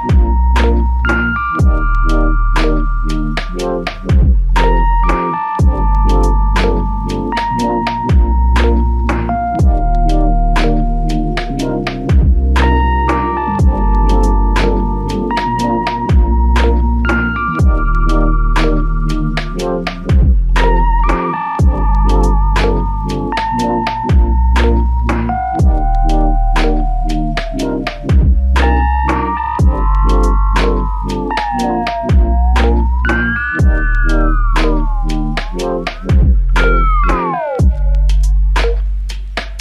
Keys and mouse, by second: 7.5-8.3 typing, 9.9 alt+click, 13.8 alt+click, 16.6 ctrl+click, 18.0 alt+click, 19.2 alt+click, 19.4 alt+click, 26.1 alt+click, 28.9 ctrl+click, 30.0 shift+click, 33.1 shift+click, 37.5 alt+click.